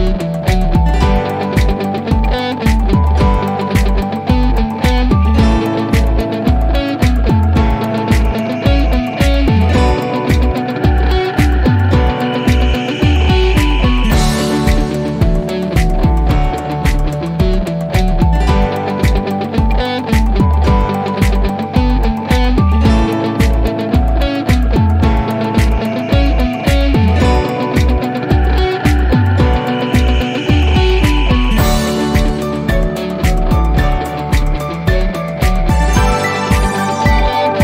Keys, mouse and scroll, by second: 36.7 click, 37.5-37.6 scroll down 1.